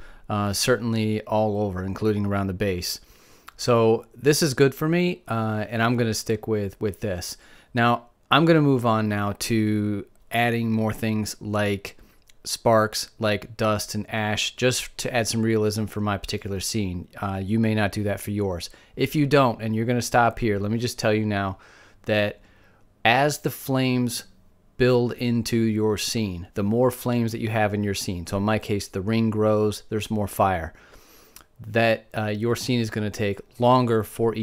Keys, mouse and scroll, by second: 2.3 middle click, 3.9-5.1 middle drag, 10.5-15.8 middle drag.